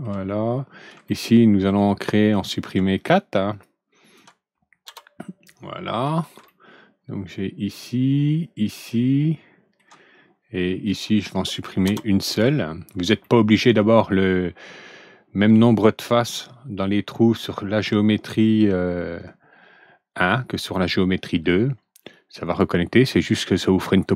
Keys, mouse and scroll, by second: 0.4 scroll up 1, 1.0 alt+middle click, 2.3 alt+click, 2.9 ctrl+click, 3.4 ctrl+click, 4.0 ctrl+click, 4.8 ctrl+Delete, 6.4-9.7 ctrl+alt+middle drag, 10.8 ctrl+alt+click, 11.8 ctrl+Delete, 12.6 middle click, 13.2-13.7 ctrl+alt+middle drag, 22.4 click.